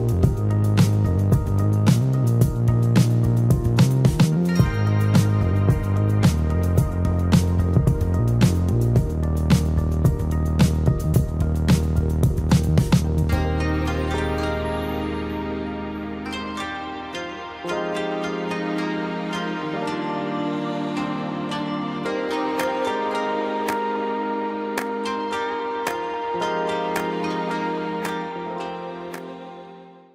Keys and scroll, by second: 1.8 p, 11.7 space, 14.2 ctrl+g, 15.3 m, 21.9 space, 22.1 Escape.